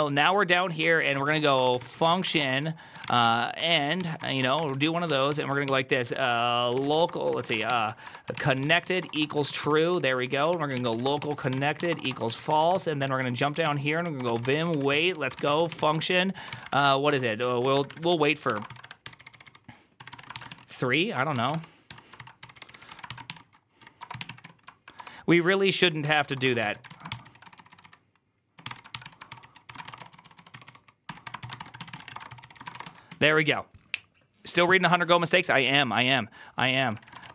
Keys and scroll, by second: 36.8-37.3 typing.